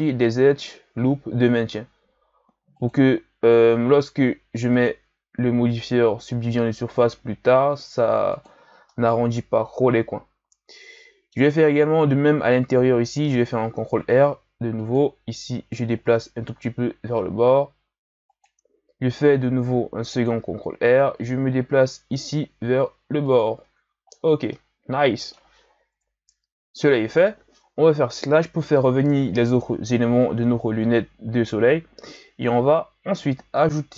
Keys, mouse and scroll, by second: 3.7 ctrl+r, 8.8-11.6 middle drag, 11.6-12.1 scroll down 2, 12.1-13.2 scroll up 1, 13.2 ctrl+r, 19.0 ctrl+r, 23.6 Tab, 24.2-24.5 scroll down 1, 24.5-25.9 middle drag, 25.9 KP_1, 28.0 KP_Divide.